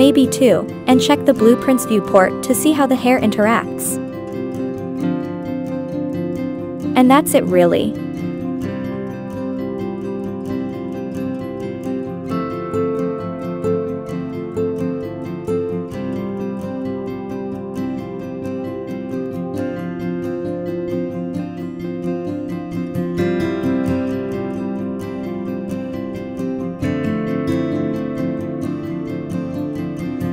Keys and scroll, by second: 1.3 Left, 1.9 Right, 2.4 Up, 2.6 Left, 3.2 Left, 3.5 Right, 8.2 Left, 8.5 Right, 8.8 Left, 10.4 1, 10.7 Return, 11.8-13.2 typing, 14.7 1, 15.0 Return, 16.0 Right, 16.4 Left, 16.8 Right, 17.1 Up, 17.4 Down, 18.7-20.5 typing, 21.7 Left, 22.0 Right, 22.4 Right, 22.9 Up, 23.1 Down, 23.6 Left, 23.8 Right.